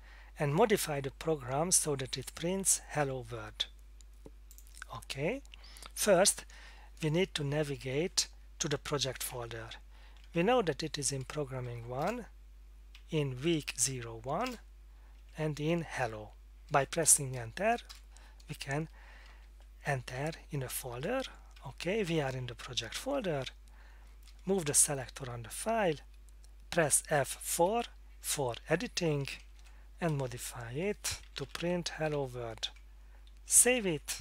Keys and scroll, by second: 9.8-10.4 Down, 10.4 Up, 10.9-16.1 Up, 11.7 Down, 11.7 typing, 12.0 Return, 13.0 Down, 14.4 Return, 15.2 Down, 19.3 Down, 21.2 Up, 21.6 Down, 24.7 Down, 27.5 F4, 29.1 End, 29.4 Left, 29.5 Left, 30.1-32.6 typing, 33.6 ctrl+s.